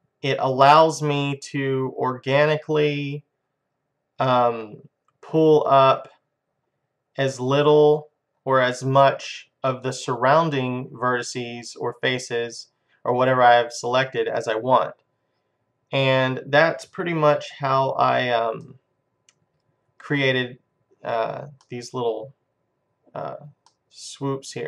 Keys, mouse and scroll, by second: 16.4-18.2 drag, 17.6 ctrl+z, 18.8-20.4 middle drag, 21.7-23.3 middle drag, 23.8-24.6 middle drag.